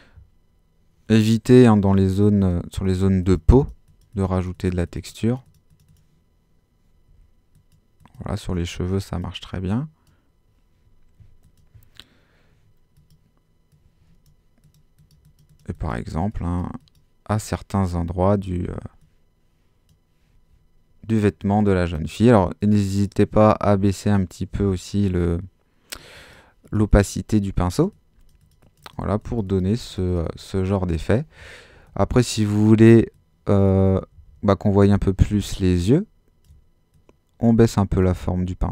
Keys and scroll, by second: 1.4 x, 7.1 x, 34.1 super+z.